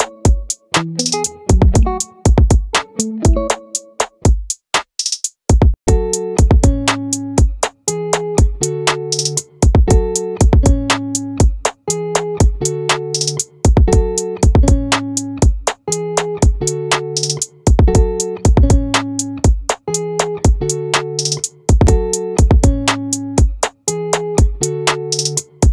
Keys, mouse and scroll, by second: 6.8 ctrl+r, 10.2 click, 12.1 ctrl+r, 16.7 ctrl+z, 17.9 ctrl+r, 24.4 middle click, 24.5-25.7 right drag.